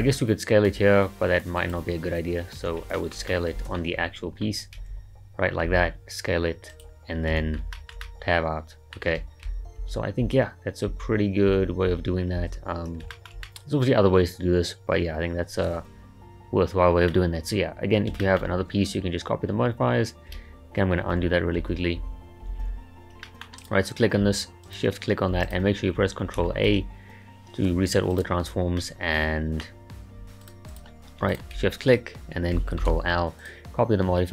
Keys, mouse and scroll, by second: 2.6 Tab, 3.0-4.8 shift+middle drag, 4.8 a, 5.7 s, 7.4 Tab, 7.7-9.5 shift+middle drag, 9.5 ctrl+z, 9.8 ctrl+z, 10.3 ctrl+z, 10.9 ctrl+z, 11.5 ctrl+z, 11.9 ctrl+z, 12.4 ctrl+z, 13.1-16.5 shift+middle drag, 18.0 scroll down 3, 18.2-18.5 shift+middle drag, 18.5-18.8 scroll up 3, 21.2 ctrl+z, 21.6 ctrl+z, 22.0 ctrl+z, 22.5 ctrl+z, 22.6 ctrl+z, 23.2-23.6 middle drag, 23.6 click, 24.6 shift+click, 25.5 click, 26.7 ctrl+a, 28.8-30.4 middle drag, 30.4 click, 30.7 click, 31.3 shift+click, 32.8 ctrl+l.